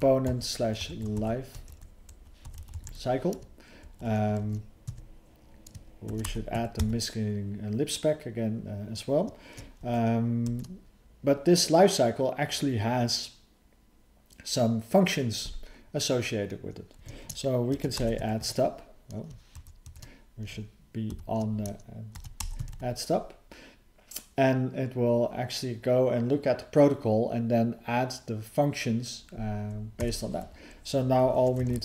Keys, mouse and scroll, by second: 0.3 /, 3.9 ctrl+s, 4.9 Tab, 9.8 alt+f, 10.5 alt+f, 19.5 alt+f, 19.8 alt+f, 31.2 BackSpace.